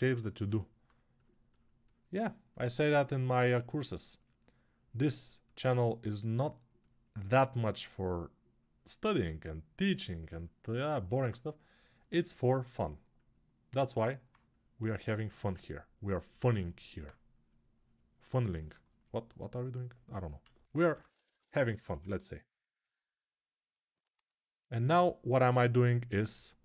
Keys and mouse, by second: 15.1 ctrl+z, 16.1 s, 20.7-22.6 [, 22.6-26.6 ctrl+drag.